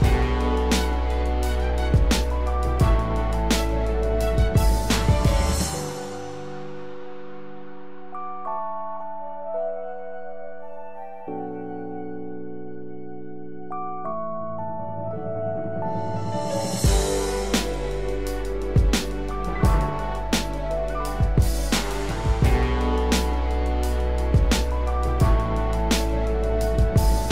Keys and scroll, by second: 24.8 ctrl+-.